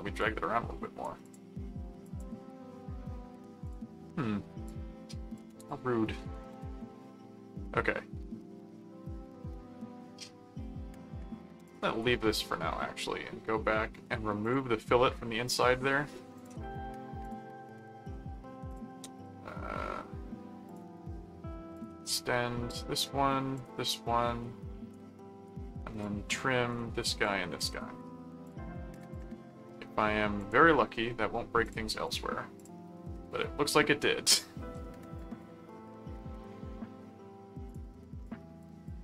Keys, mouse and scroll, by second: 0.2 click, 1.2 click, 2.1 click, 3.6 click, 4.6 click, 5.6 click, 11.6 click, 14.4 click, 16.4 click, 17.2 click, 18.6 click, 20.7 click, 21.7 click, 22.7 click, 23.5 click, 24.9 right click, 26.0 click, 27.0 click, 28.4 click, 30.4 click, 31.6-33.1 drag, 34.2 click, 35.1 click, 37.6 click, 38.7 click, 38.9 click.